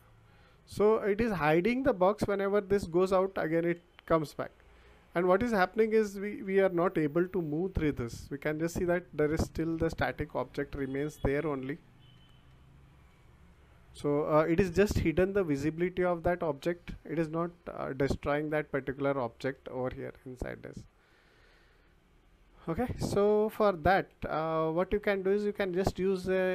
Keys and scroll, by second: 0.6 w, 2.5 w, 3.7 s, 4.4 w, 9.4 d, 9.8 w, 11.5 a, 11.9 w, 12.5 d, 13.1 w, 15.1 a, 15.8 w, 18.1-21.2 typing, 22.5 d, 23.8 Escape.